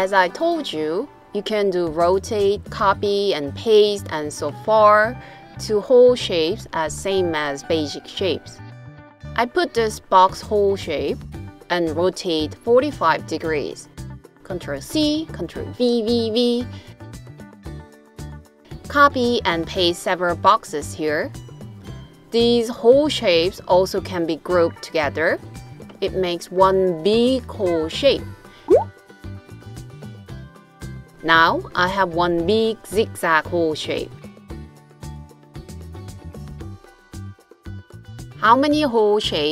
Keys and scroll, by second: 11.5 super+c, 14.0 super+v, 14.8 super+v, 15.6 super+v.